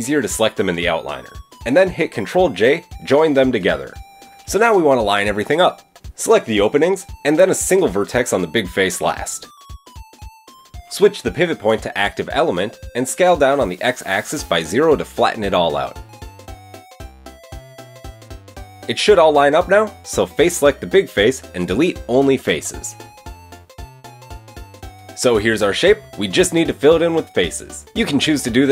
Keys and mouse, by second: 0.3 click, 0.9 shift+click, 2.5 ctrl+j, 6.4 Tab, 8.7 alt+click, 10.1 alt+shift+click, 10.9 shift+click, 11.5 middle click, 11.6-18.8 drag, 14.8 s, 19.0 click, 21.1 click, 22.5 x, 25.5 Tab, 27.3 middle click, 28.0 Tab.